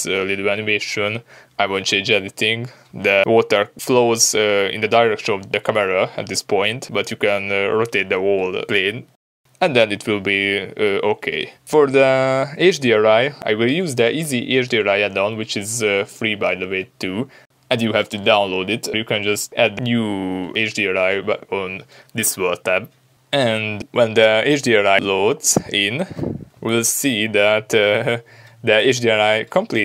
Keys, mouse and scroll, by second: 0.1-1.4 middle drag, 1.8 space, 2.4-2.8 middle drag, 5.0-14.3 shift+middle drag, 14.3 click, 15.6 click, 16.8 click, 18.8 click, 24.3 click, 24.9 click, 25.6 click, 26.7 scroll down 1.